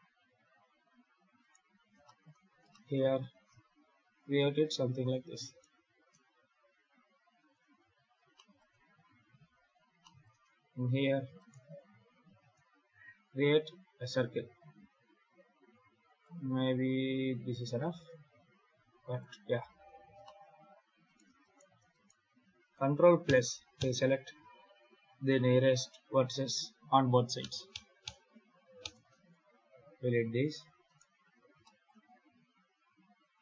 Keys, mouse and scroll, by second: 0.1 scroll up 1, 0.4-0.8 scroll down 2, 1.3 right click, 1.9 shift+middle click, 2.2 scroll up 3, 2.6 shift+middle click, 3.2 e, 5.3 right click, 5.8 e, 7.6 Tab, 7.9-8.2 scroll down 2, 8.2 shift+middle click, 9.9 shift+middle click, 10.3 Tab, 11.2 right click, 11.6 shift+s, 12.2 shift+a, 14.0 scroll down 3, 14.6 s, 16.5-17.1 scroll down 2, 17.1-17.4 scroll up 5, 17.6 s, 19.6 alt+a, 19.7 scroll up 3, 20.1 shift+middle click, 20.9 right click, 21.3 shift+right click, 21.8 right click, 23.1 ctrl+KP_Add, 23.6 ctrl+KP_Add, 27.3 ctrl+KP_Add, 27.6 ctrl+KP_Add, 27.9 ctrl+KP_Add, 28.7 ctrl+KP_Add, 29.6 x, 30.7 right click, 31.3 scroll up 3, 31.5 shift+middle click, 32.1 e.